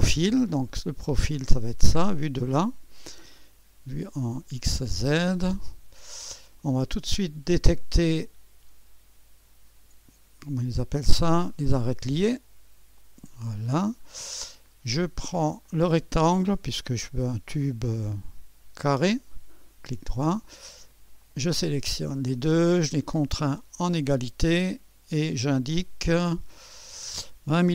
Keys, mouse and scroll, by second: 0.7-1.8 drag, 4.9-6.0 drag, 5.9 scroll up 2, 6.7-7.9 right drag, 8.0 right click, 11.6 click, 13.0-14.1 drag, 14.1-15.7 scroll up 1, 15.7 click, 18.1-20.1 drag, 19.4-20.4 right drag, 21.2-22.4 drag, 23.8-24.9 drag, 25.4-26.5 drag, 26.8 click.